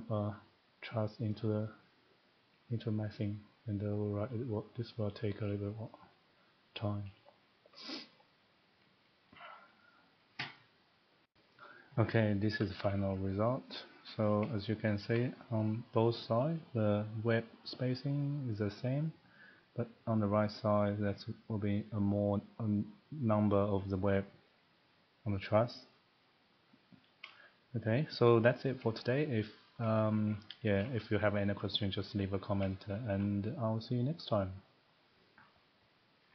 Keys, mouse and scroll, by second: 1.3 click, 4.5 click, 11.2 click, 12.6 middle click, 14.1 shift+middle click, 14.2 middle click, 14.3 middle click, 14.8 scroll up 2, 15.1 shift+middle click, 16.1 scroll, 20.1 scroll up 2, 27.3 shift+middle click, 28.2 shift+middle click, 28.4 middle click, 28.8 middle click, 29.7 shift+middle click, 30.3 middle click, 30.4 middle click, 30.8 shift+middle click, 31.4 middle click, 31.9 scroll, 34.0 scroll up 3, 34.2 middle click.